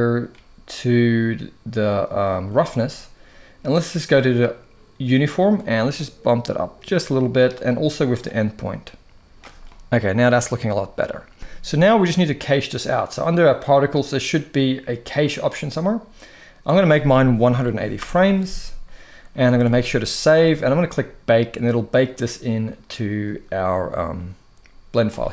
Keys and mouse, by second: 2.2 click, 5.2-7.2 drag, 7.9-9.1 drag, 9.4-11.3 middle drag, 15.0 click, 16.4-17.7 drag, 19.3 ctrl+s, 19.4 ctrl+s, 24.8-25.3 drag.